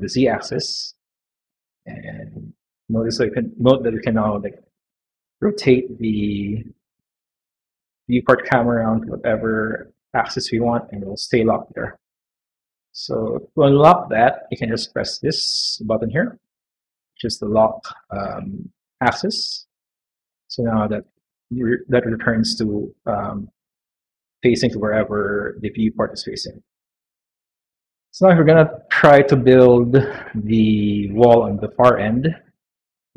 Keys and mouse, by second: 0.6 middle click, 2.1-3.6 middle drag, 4.1 middle click, 5.6 click, 6.5 click, 7.8 middle click, 8.8 middle click, 9.9 click, 11.0 middle click, 12.2 middle click, 12.5 middle click, 13.4 shift+middle click, 13.8 middle click, 19.1 click, 19.6 middle click, 19.8 click, 20.0-25.4 middle drag, 25.9 shift+middle click, 26.6 middle click.